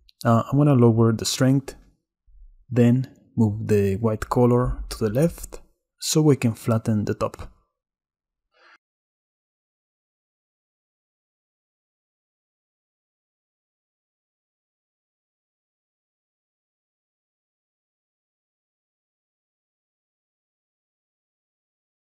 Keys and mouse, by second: 0.6-3.5 shift+drag, 5.5 middle click, 10.0 click, 10.8 click, 16.4-16.8 drag, 17.0 drag, 19.6-21.6 shift+middle drag.